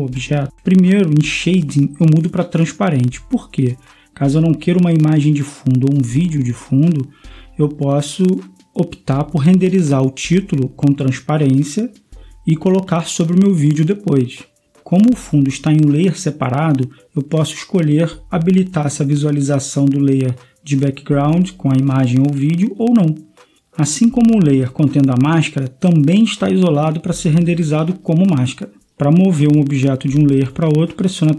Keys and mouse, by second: 0.0-1.5 drag, 2.7-7.7 drag, 9.8-11.5 drag, 13.4-17.2 right drag, 22.7 click, 27.0-31.3 drag, 29.1 right click.